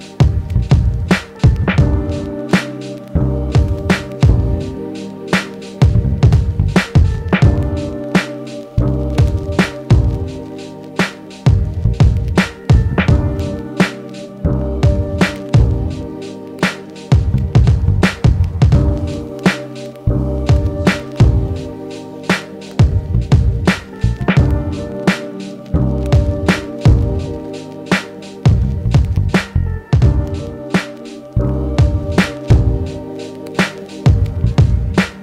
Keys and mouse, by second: 8.6 ctrl+z, 18.5 f, 19.0 middle click, 19.4-35.2 drag, 22.3 ctrl+z, 23.1 ctrl+z, 23.7 ctrl+z.